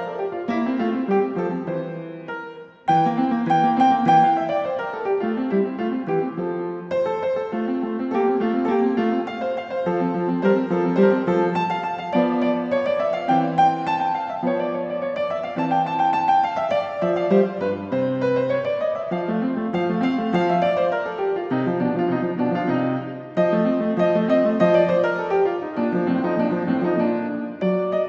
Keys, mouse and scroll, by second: 0.3-1.5 ctrl+scroll, 4.6 s, 5.4 click, 6.8 click, 8.0 click, 9.4 Escape, 10.6 click, 11.3 q, 12.8 click, 13.5 click, 14.9 click, 16.5-17.1 ctrl+scroll, 17.1 ctrl+scroll, 17.3 click, 17.9-18.4 scroll, 19.2-19.5 ctrl+scroll, 19.5 s, 20.9 click, 23.2 click, 23.9 click, 24.9-25.4 typing, 26.5 Return.